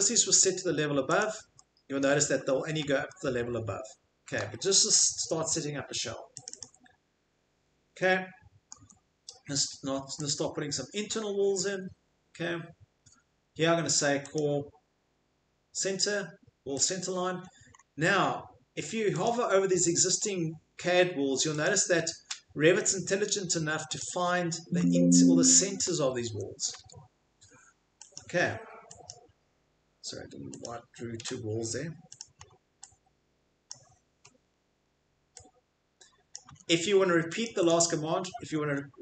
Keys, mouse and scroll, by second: 1.2 click, 2.0 shift+click, 2.2 click, 2.4 Escape, 2.4 click, 4.3 shift+middle click, 5.0 middle click, 5.2 Escape, 6.4 right click, 6.6 click, 7.4 middle click, 7.5 middle click, 7.7 middle click, 8.7 middle click, 8.8 Escape, 10.3 click, 17.3-17.8 middle click, 17.4 middle click, 17.8 middle click, 19.2 click, 19.8 middle click, 20.2 middle click, 21.6 scroll, 21.6 click, 24.8 Escape, 24.8-25.3 scroll, 25.8 middle click, 26.3 Escape, 27.9 Escape, 28.2 click, 29.1 click, 30.6 click, 31.2 Delete, 32.2 click, 32.4 middle click, 33.7 click, 34.4 middle click, 34.7 middle click, 36.4 click, 36.4 Escape, 36.5-39.0 middle click, 37.4 click, 37.7 right click, 38.4 Escape, 38.6 Escape.